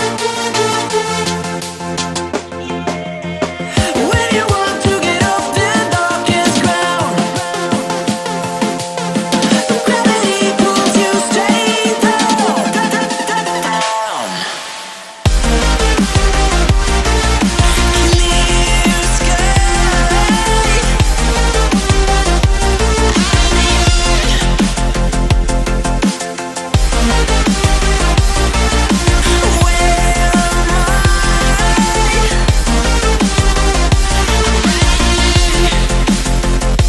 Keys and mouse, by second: 0.9 Down, 1.3 Right, 2.4 click, 2.6 space, 2.8-3.2 click, 3.2 space, 3.7-5.2 drag, 5.3 Down, 6.4 Left, 7.1 Down, 8.3 click, 8.6 space, 8.7 click, 8.9-9.2 space, 10.5 click, 10.7 space, 11.1 ctrl+=, 11.3 space, 11.6 click, 11.7 space, 15.4 click, 15.5-19.4 typing, 17.7 ctrl+a, 20.4 ctrl+a, 21.4 click, 23.1-23.8 shift+click, 24.1-25.9 drag, 27.1 Right, 27.9-30.0 drag, 28.8-29.7 click, 33.4-36.8 drag.